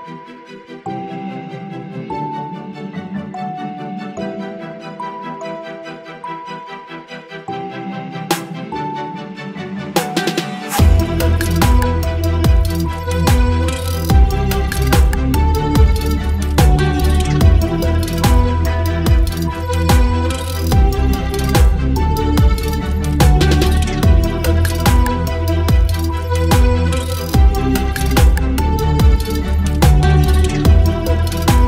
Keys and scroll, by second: 1.6 space, 16.3 Return, 25.9 ctrl+t.